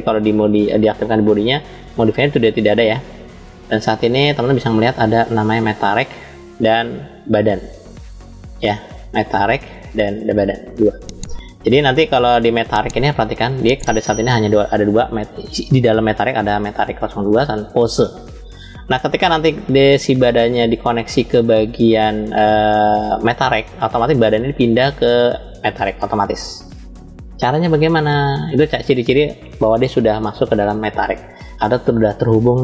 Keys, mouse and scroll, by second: 0.9 click, 3.2-4.9 drag, 5.7 click, 7.1 click, 9.4 click, 10.3 click, 12.4 click.